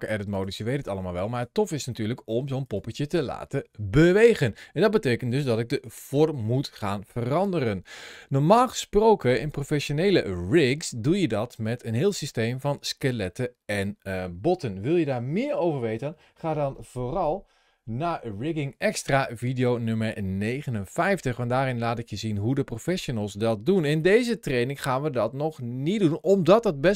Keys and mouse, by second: 0.9 middle click, 1.2 Tab, 2.1 middle click, 2.4 click, 22.4-23.8 middle drag, 24.3 middle click.